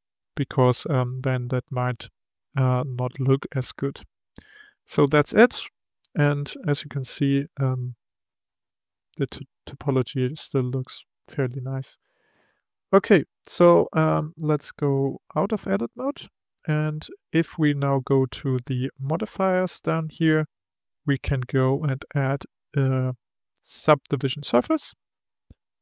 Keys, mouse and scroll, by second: 1.9-4.9 middle drag, 8.5-11.6 middle drag, 12.5-15.4 scroll down 3, 15.4 Tab, 15.9 click, 16.5-18.3 middle drag, 18.3 click, 24.6 click.